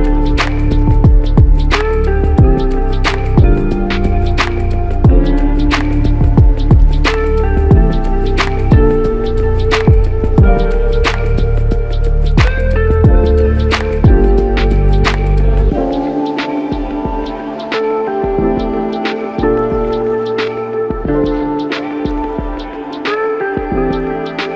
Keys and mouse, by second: 0.6-1.0 typing, 2.1 alt+shift+click, 4.3 typing, 9.7 alt+click, 11.0-11.4 typing, 12.2 ctrl+alt+click, 16.9 f, 20.5 double click.